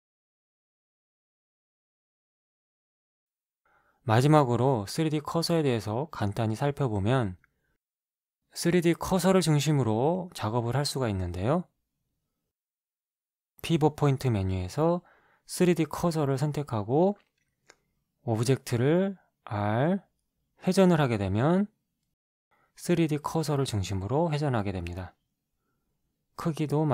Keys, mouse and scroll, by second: 3.0 x, 3.1 x, 6.4 right click, 13.5 click, 18.6-20.0 drag, 20.2 shift+middle click, 21.4 r, 24.9 s.